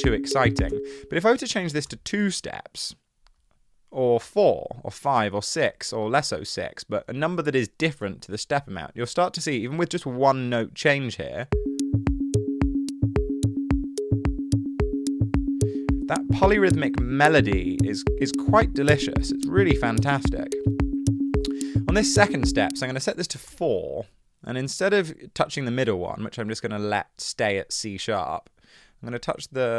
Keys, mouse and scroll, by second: 0.8 space, 1.6 2, 1.9 Return, 12.5 space, 22.7 space, 23.4 4, 23.5 Return.